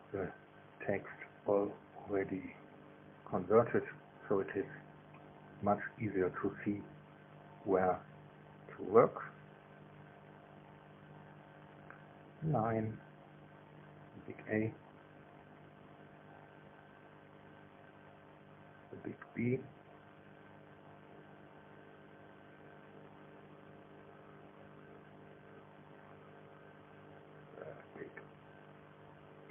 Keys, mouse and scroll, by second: 0.2 click, 1.6 click, 2.7 click, 3.6 KP_0, 3.8 KP_Decimal, 4.1 KP_0, 4.4 KP_1, 4.6 KP_Enter, 6.5 space, 7.1 click, 8.2 click, 9.2 click, 10.8 KP_0, 11.1 KP_Decimal, 11.3 KP_0, 11.6 KP_1, 12.5 KP_Enter, 13.9 space, 14.7 click, 15.7 click, 16.5 click, 17.7 KP_0, 17.9 KP_Decimal, 18.1 KP_0, 18.4 KP_1, 18.7 KP_Enter, 19.8 space, 21.0 click, 22.1 click, 24.1 click, 25.4 KP_0, 25.6 KP_Decimal, 25.8 KP_0, 26.0 KP_1, 26.2 KP_Enter, 27.7 space, 28.4 click, 29.2 click.